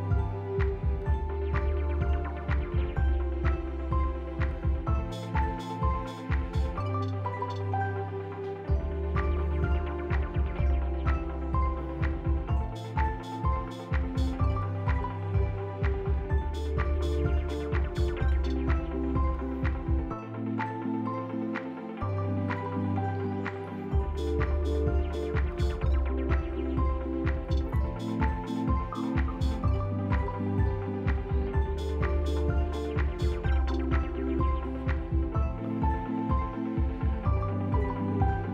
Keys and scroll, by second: 0.3 z, 3.7 ctrl+z, 5.0 alt+x, 6.6 ctrl+z, 8.5 f, 10.3 s, 14.0 F4, 14.5 s, 22.0 b, 22.9 f, 25.4 f, 27.4 5, 27.4 Return, 27.6 BackSpace, 27.7 5, 28.1 BackSpace, 28.2 Return, 28.9 F4, 29.2 f, 30.9 F4, 31.2 Delete, 32.4 Delete, 32.7 Delete, 33.1 Delete, 33.9 Delete, 34.5 Delete, 35.1 ctrl+z, 35.2 ctrl+z, 36.1 Delete, 36.9 ctrl+z, 37.0 Delete, 37.7 Delete, 37.9 F3.